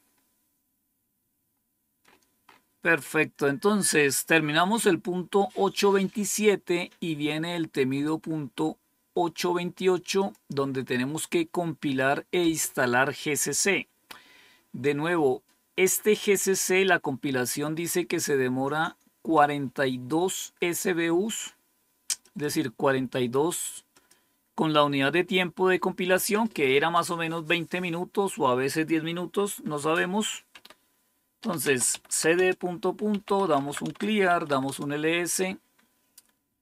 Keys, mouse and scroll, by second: 1.9-3.3 scroll up 1, 3.3-10.1 scroll up 1, 10.1 click, 19.2-20.6 drag, 22.1 click, 23.8 click, 30.4-35.0 typing, 32.3 Return.